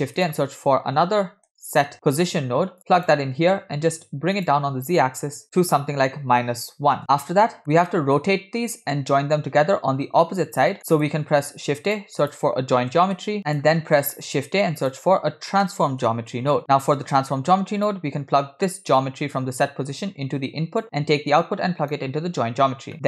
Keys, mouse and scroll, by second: 3.6-4.4 scroll up 2, 4.4-7.0 drag, 7.3 scroll down 2, 7.5 middle click, 7.9-8.3 middle drag, 7.9 scroll down 1, 10.8 click, 10.8 middle click, 11.4 shift+a, 14.1 shift+a, 19.0 click, 21.5-22.0 alt+right drag.